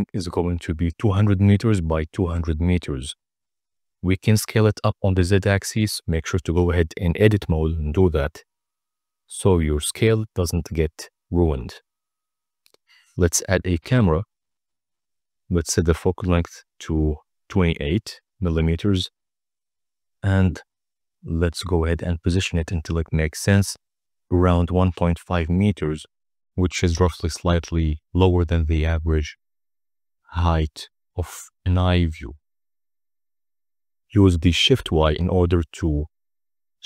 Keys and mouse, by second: 1.3 s, 1.6 z, 4.9 Tab, 5.2 a, 5.4 s, 5.7 z, 7.5 Tab, 8.2-8.7 middle drag, 9.4 g, 10.5 x, 11.8 drag, 12.6 shift+a, 15.3-17.2 drag, 17.4 click, 19.0 click, 19.5 click, 21.1 drag, 21.5 click, 24.1-25.2 typing, 25.7 Return, 26.3 r, 26.4 z, 26.6 9, 26.7 0, 27.7 middle click, 28.2 middle drag, 28.9 click, 29.1 KP_0, 29.5 click, 30.3 shift+click.